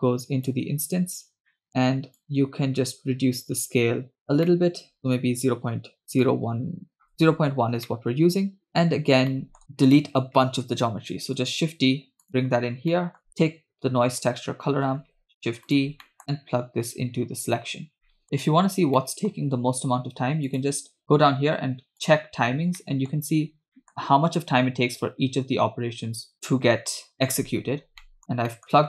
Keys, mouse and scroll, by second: 1.4 scroll up 2, 1.6 middle click, 2.2-4.2 shift+drag, 4.2-4.5 scroll up 1, 4.5 middle click, 5.0 scroll down 1, 6.3 shift+click, 7.9-8.7 middle drag, 8.7-9.3 scroll down 3, 9.3 middle click, 9.9 click, 11.2 shift+d, 12.9 middle click, 13.3-14.3 drag, 13.3-14.3 scroll down 2, 15.0 shift+d, 16.1 middle click, 16.3 click, 16.7-17.5 drag, 18.1 middle click, 18.2 click, 18.2 scroll up 3, 19.0 scroll down 1, 19.0 middle click, 20.5-22.3 drag, 22.5 scroll down 1, 22.8 middle click, 23.5-24.2 scroll up 3, 23.7 middle click, 27.8 scroll down 2, 28.0 middle click, 28.2 scroll up 1, 28.5-28.8 middle drag, 28.5-28.8 scroll down 1.